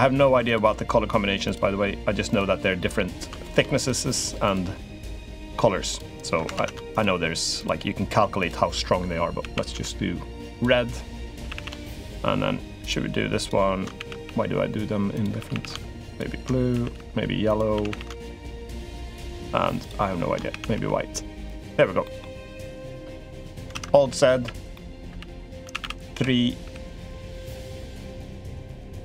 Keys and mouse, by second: 0.2 alt+shift+click, 1.3 alt+shift+click, 2.1 alt+shift+click, 3.5 alt+shift+click, 4.2 alt+shift+click, 5.1 alt+shift+click, 5.7 alt+shift+click, 6.3 ctrl+z, 6.7 alt+shift+click, 7.3 alt+shift+click, 8.1 alt+shift+click, 9.2 a, 9.5 g, 11.2 a, 11.3 a, 13.7 a, 14.0 g, 15.1 a, 15.3 a, 15.8 alt+shift+click, 16.5 a, 16.7 g, 17.5 a, 17.7 a, 18.2 alt+shift+click, 18.8 alt+shift+click, 19.6 alt+shift+click, 20.3 a, 20.5 g, 21.8 middle click, 23.1 click, 23.4 alt+z, 23.7 click, 24.2-26.4 typing, 24.5 click, 25.1 click, 27.4 b.